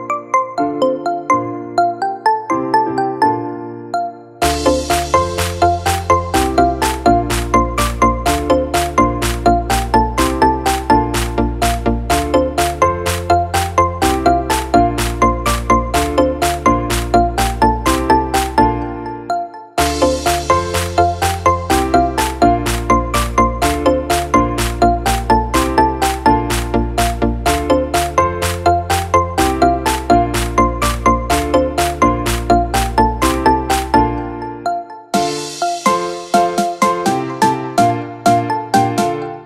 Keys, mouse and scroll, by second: 23.0 space, 29.8 space, 31.7 space.